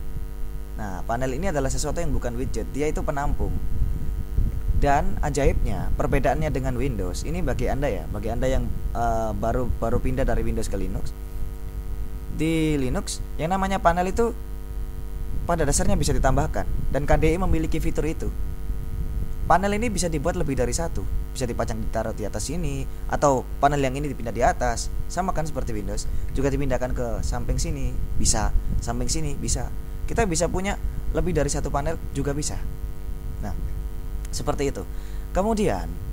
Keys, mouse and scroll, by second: 0.0 click.